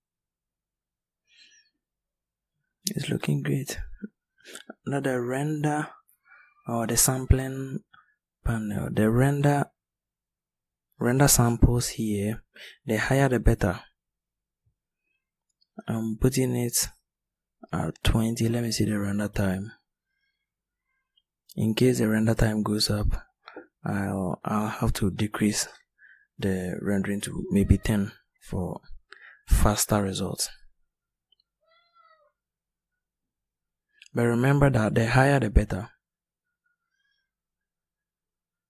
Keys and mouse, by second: 35.6-38.2 middle drag.